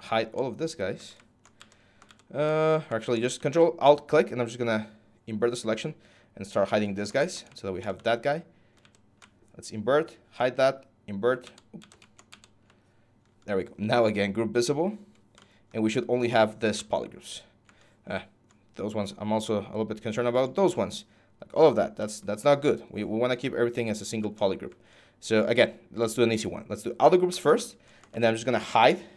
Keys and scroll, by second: 1.3 ctrl+z, 1.8 ctrl+z, 8.6 ctrl+z, 11.2 ctrl+shift+z, 11.6 ctrl+shift+z.